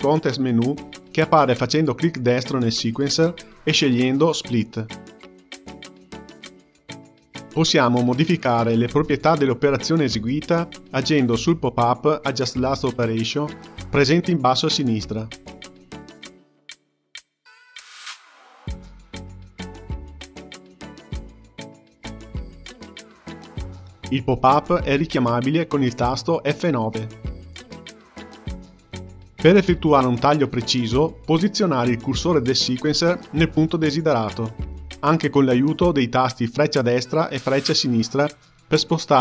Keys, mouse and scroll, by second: 0.0 click, 0.1 w, 3.6-6.2 drag, 6.2-9.3 right drag, 15.5-21.8 drag, 25.1 click, 26.5 F9, 31.7 click, 32.9-35.9 drag, 35.9 Left, 36.1 Left, 36.3 Left, 36.9 Left.